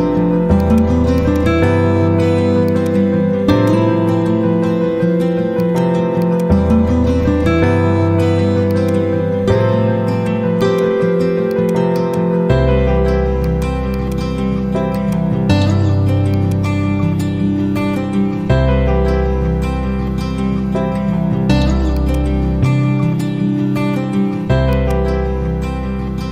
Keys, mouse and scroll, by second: 0.5-4.7 drag, 8.7-9.5 drag, 25.5 F4.